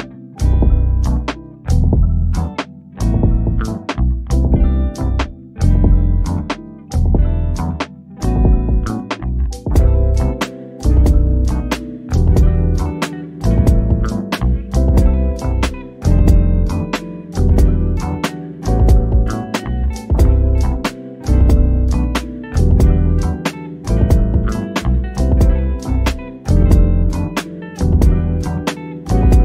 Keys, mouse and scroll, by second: 0.9 ctrl+z, 1.5-1.9 scroll up 1, 2.5 Escape, 3.1 click, 6.7 click, 7.9-8.6 scroll up 2, 9.5 click, 13.3 click, 13.9 scroll down 1, 14.9 click, 15.4 scroll down 1, 16.1 middle click, 16.5-16.9 scroll up 1, 18.0 click, 18.9 o, 19.2 click, 20.6 click, 21.9 scroll up 1, 22.2 click, 23.2 Escape, 25.3 click, 27.4 click, 28.0 scroll down 1, 28.6-29.4 drag.